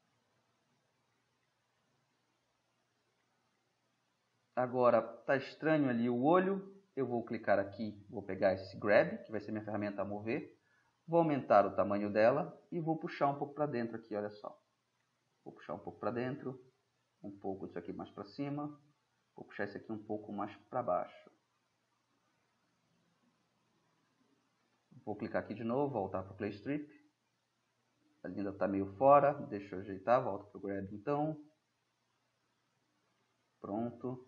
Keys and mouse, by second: 0.1-2.9 drag, 4.1-6.4 middle drag, 6.7-7.6 middle drag, 9.4-10.6 middle drag, 11.2 ], 13.8-15.5 drag, 16.6-18.4 drag, 19.6-21.3 drag, 22.6-24.2 middle drag, 26.1-26.6 drag, 26.6-28.2 middle drag, 30.8 drag, 31.0 middle click, 31.2-31.6 drag, 31.9 click, 33.3 drag, 33.7-34.2 middle drag.